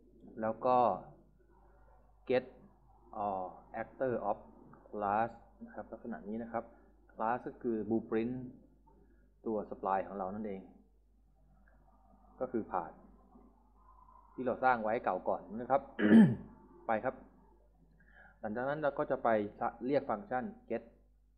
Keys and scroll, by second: 1.9-4.2 typing, 10.7 s, 11.3 BackSpace, 12.4-13.5 typing, 20.1-21.3 typing.